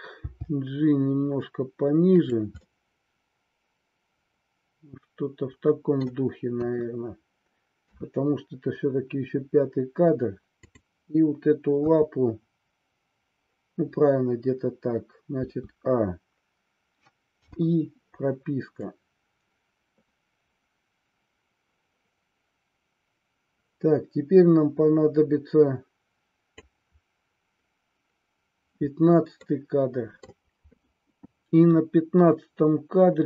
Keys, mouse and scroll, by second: 0.3 g, 2.2 click, 2.6-6.1 middle drag, 6.6 KP_1, 7.9 KP_3, 10.7-11.8 drag, 11.9 KP_3, 15.4 a, 17.4 i, 18.8-26.7 drag, 29.3 middle click.